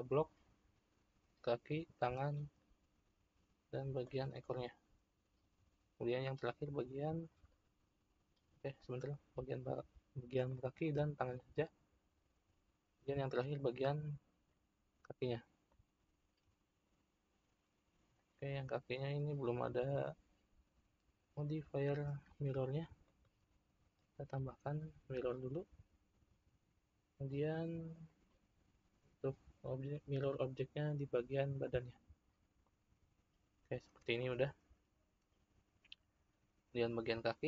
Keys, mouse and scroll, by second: 1.7 shift+click, 4.0 shift+click, 8.6 click, 10.4-11.1 middle drag, 11.1 shift+click, 13.6 shift+click, 14.4-18.0 middle drag, 18.0 click, 19.0-22.1 middle drag, 25.2 click, 27.9 click, 32.6-35.1 middle drag, 35.1-37.1 scroll up 1, 37.1 click.